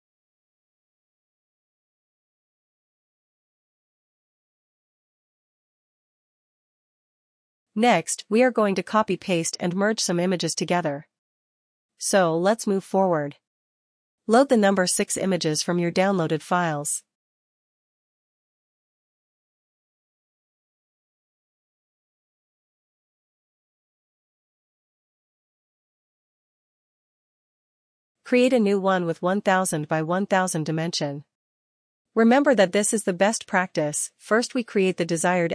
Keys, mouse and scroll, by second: 7.5 click, 16.1 click, 17.7 click, 21.6 click, 22.5 click, 28.4 click, 30.3 click.